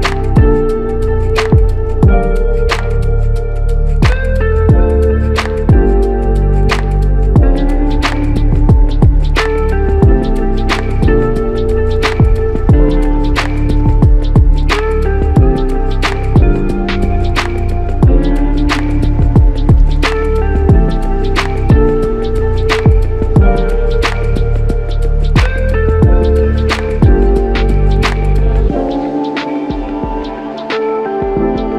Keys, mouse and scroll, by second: 0.0 ctrl+z, 21.0 f.